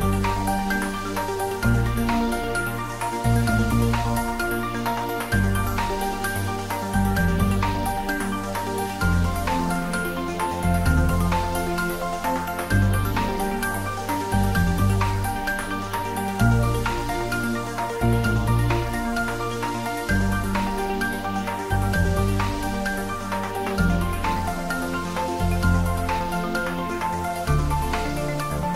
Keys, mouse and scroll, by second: 0.8 click, 2.0 g, 3.8 y, 3.8 click, 4.8 g, 7.1 click, 7.6 click, 8.3 click, 9.4 g, 10.2 click, 11.6 g, 13.8 click, 14.6 shift+middle click, 15.3 Tab, 15.7-17.4 middle drag, 17.4 shift+z, 17.6 middle click, 18.8 ctrl+middle click, 19.5 ctrl+3, 19.7-21.4 middle drag, 21.4 ctrl+z, 21.9 middle click, 22.2 Tab, 23.4 ctrl+3, 23.8-25.4 middle drag, 25.4 Tab, 25.9 ctrl+r, 26.2 click, 27.5 ctrl+e, 28.4 middle click.